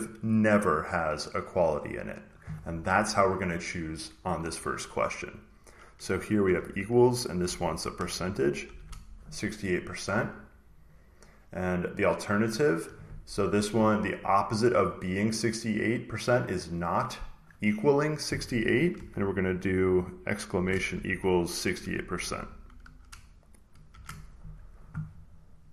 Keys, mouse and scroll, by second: 1.1 click, 6.3-9.0 typing, 10.6 click, 11.9 click, 12.5-14.6 drag, 15.9 click, 17.2 click, 18.1-22.5 drag, 20.4-22.5 typing, 23.8 shift+5, 25.6 click.